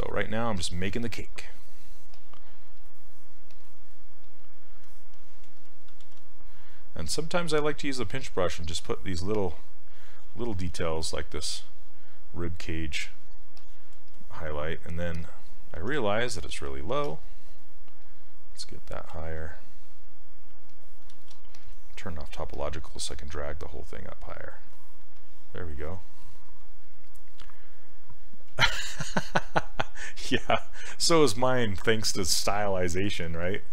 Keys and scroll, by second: 6.1 ctrl+z, 15.9 s, 17.1 s, 21.2 ctrl+z, 22.5 s, 30.1 s.